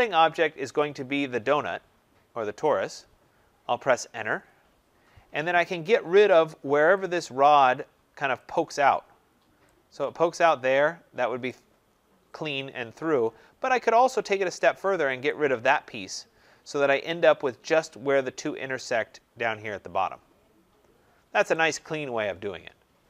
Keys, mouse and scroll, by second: 4.2 Return, 7.1 click, 8.4 click, 9.1 middle click, 9.1 middle click, 11.4 right click, 11.9 scroll, 12.8-13.4 scroll, 13.4 scroll, 15.2 click, 15.9 scroll, 16.8 scroll, 16.9 middle click, 17.1 middle click, 20.7 middle click, 20.8 middle click, 20.9 middle click, 22.7 scroll.